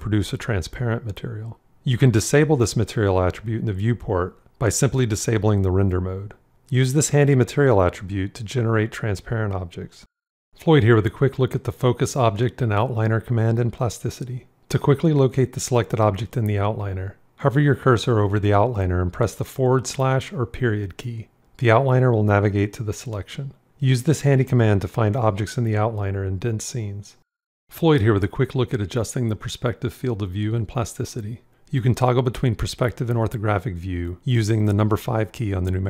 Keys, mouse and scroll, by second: 19.7 /, 23.8 ., 34.4 KP_5.